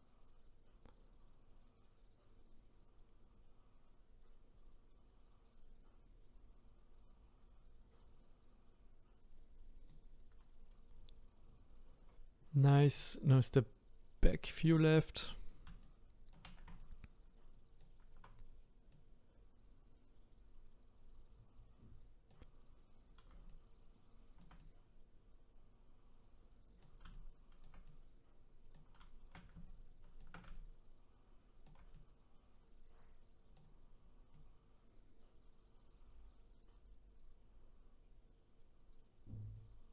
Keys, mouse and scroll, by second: 13.0 click, 14.6 click, 15.8-22.1 shift+right drag, 23.5-34.3 shift+right drag, 34.3-37.3 drag.